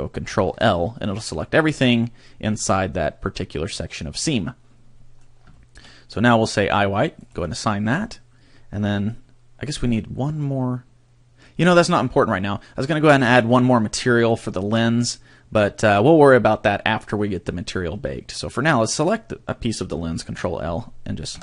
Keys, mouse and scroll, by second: 0.5 ctrl+l, 1.0 middle click, 1.7-2.5 scroll up 3, 2.5-3.5 scroll down 1, 3.5 middle click, 3.5 scroll down 1, 5.5 shift+middle click, 7.2 click, 18.9 right click, 20.3 ctrl+l, 21.3 h.